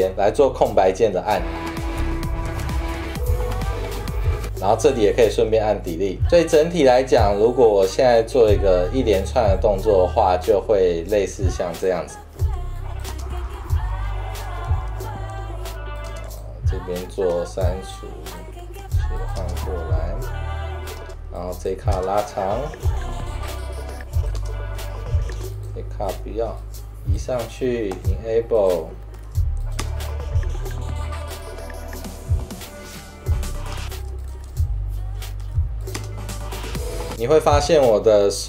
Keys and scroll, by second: 1.5-4.6 typing, 12.5 super+4, 13.2 space, 13.7 -, 13.9 =, 14.9 c, 16.2 space, 16.4 v, 17.4 Delete, 19.0 super+4, 19.5 space, 21.2 space, 23.0 -, 23.4 =, 24.0 space, 26.4 Delete, 28.0 super+2, 29.3 super+4, 30.0 space, 33.9 space, 34.3 c, 34.6 v, 35.7 super+4, 36.1 space.